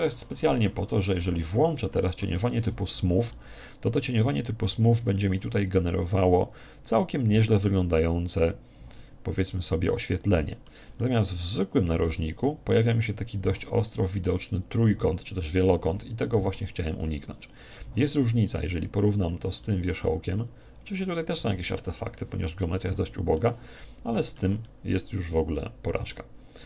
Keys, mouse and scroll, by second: 2.3 click, 3.4-5.1 middle drag, 5.2-7.6 middle drag, 11.0-12.7 middle drag, 14.7-16.5 scroll up 1, 16.5 scroll up 1, 17.8-19.6 middle drag, 19.6-21.4 middle drag, 22.6-26.4 middle drag.